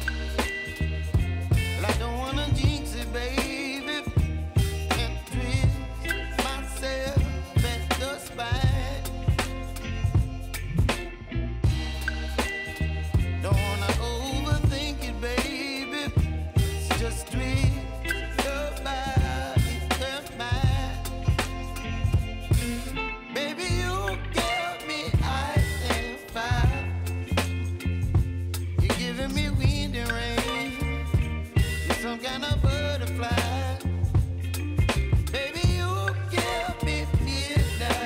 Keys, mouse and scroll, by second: 8.1 ctrl+alt+Home, 9.9 click, 11.4 u, 12.7 click, 15.3 ctrl+z, 16.9 click, 19.5 shift+click, 27.1 ctrl+alt+Home, 28.6 click, 30.9-31.6 alt+scroll up 1, 32.2 click, 36.2-37.1 scroll down 1, 37.1 click, 37.6 space, 37.9 click.